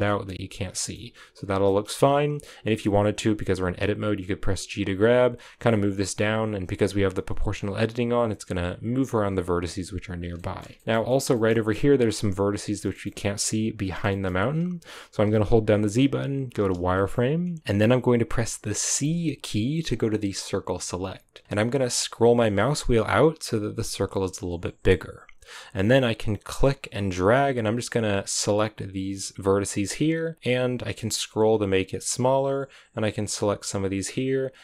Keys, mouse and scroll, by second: 0.0 shift+middle click, 0.8-1.3 scroll up 3, 1.3 scroll down 4, 1.5-2.6 shift+middle drag, 2.6 right click, 3.5 g, 6.8-7.4 scroll down 3, 7.4-8.4 scroll up 5, 8.4 right click, 8.5 g, 10.1 scroll down 5, 10.3-11.4 shift+middle drag, 11.4-12.0 scroll up 1, 12.0-12.6 scroll up 1, 12.6 scroll down 1, 12.7 shift+middle click, 13.1-13.7 scroll up 2, 13.7 scroll down 1, 13.8 shift+middle click, 14.2-16.5 scroll up 1, 16.5 z, 16.9-26.4 shift+middle drag.